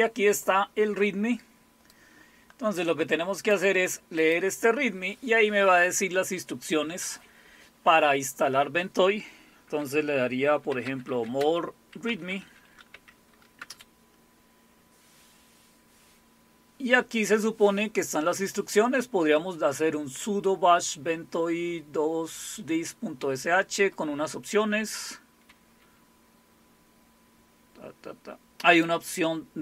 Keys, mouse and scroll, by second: 1.9-4.4 drag, 10.5-14.1 typing, 28.8-29.6 drag.